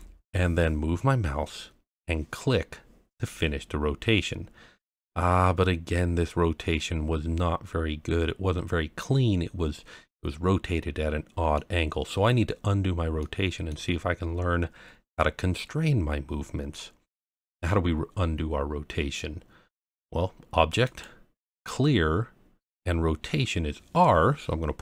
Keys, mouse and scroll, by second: 3.1 click, 4.1-11.5 middle drag, 13.2-13.7 middle drag, 20.8-24.4 drag.